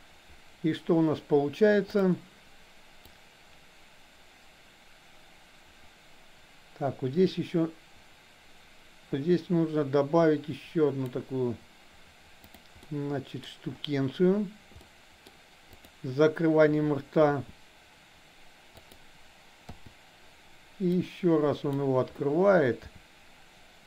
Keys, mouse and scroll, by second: 3.1-11.1 drag, 12.4 click, 12.9-13.4 middle drag, 14.9-15.2 middle drag, 15.7 click, 17.2 r, 19.7 i, 21.0 click, 23.0 r.